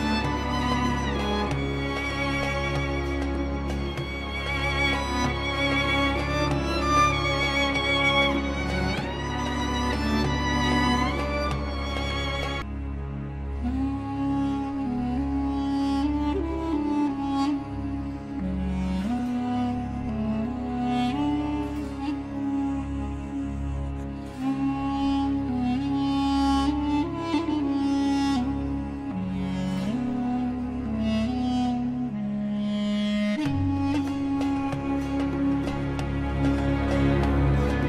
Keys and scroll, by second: 0.4 Escape, 9.3 shift+Page_Up, 30.4 Escape, 35.4 F3.